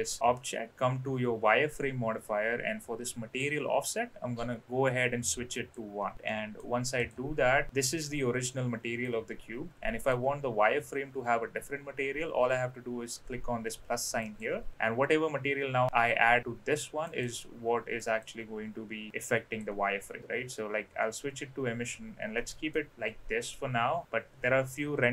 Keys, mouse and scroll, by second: 2.7-3.5 drag, 5.5 click, 6.3 middle click, 7.0 click, 7.7 click, 8.4 click, 10.0 click, 14.2 click, 17.1 click, 18.0-19.7 drag, 22.3 middle click.